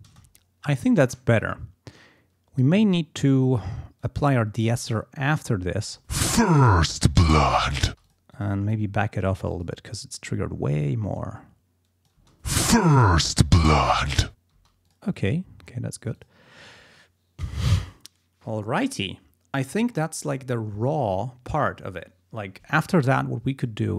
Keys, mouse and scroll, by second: 0.1 space, 1.9 click, 4.0-5.1 drag, 5.8 space, 7.9 space, 8.1 click, 8.7-9.9 drag, 11.2-12.3 drag, 12.2 space, 14.6 space, 14.9 click.